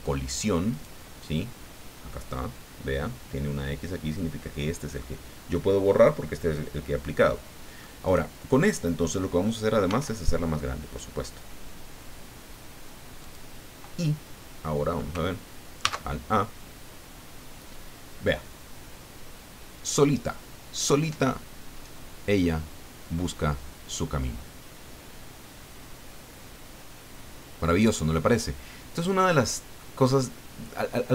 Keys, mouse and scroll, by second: 0.7 right click, 7.3 middle click, 8.1 right click, 8.7 click, 9.8 s, 13.2 click, 15.8 alt+a.